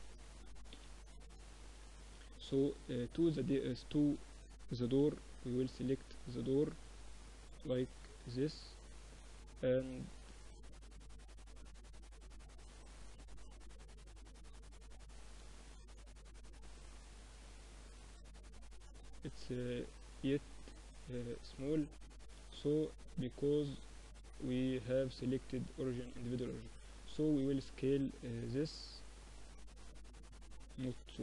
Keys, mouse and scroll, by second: 0.6-1.7 middle drag, 1.7-3.6 right drag, 2.1 a, 2.7 a, 3.2 a, 4.0 b, 5.1 z, 5.6 a, 6.4 b, 8.3-10.1 drag, 10.4-12.3 drag, 13.3-14.7 drag, 14.7-17.4 middle drag, 14.9 z, 18.3 s, 19.9-21.5 middle drag, 21.6-23.1 middle drag, 23.1 click, 23.9-25.7 drag, 25.9 s, 28.7 s, 30.1 KP_1.